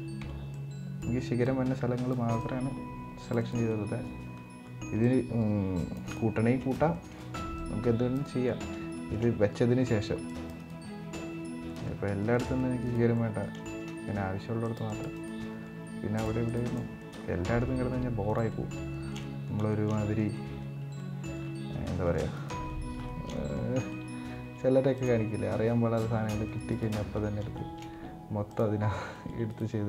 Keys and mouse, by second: 3.4 middle click, 4.1-4.4 middle drag, 5.1 c, 6.1-6.4 middle drag, 6.6 middle click, 7.0 c, 8.2-8.9 shift+middle drag, 9.8 c, 10.6 middle click, 11.0 c, 12.9 middle click, 13.3 shift+middle click, 13.7 middle click, 14.0 c, 15.1 middle drag, 15.8 c, 18.2-18.5 middle drag, 18.6 shift+middle click, 19.4 shift+middle click, 19.7 middle click, 20.1 middle click, 20.7-21.1 middle drag, 22.4 middle click, 22.4 c, 22.8 shift+middle drag, 23.1 middle click, 23.6 middle drag, 24.1 c, 26.9 middle click, 27.2 shift+middle click, 29.6 middle click, 29.6 c.